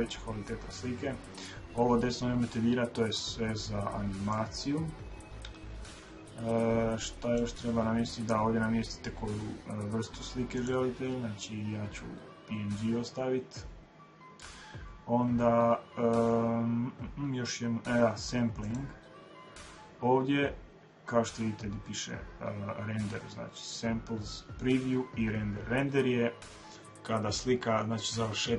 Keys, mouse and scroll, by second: 4.0-6.0 drag, 10.3-12.1 drag, 18.4-20.3 drag.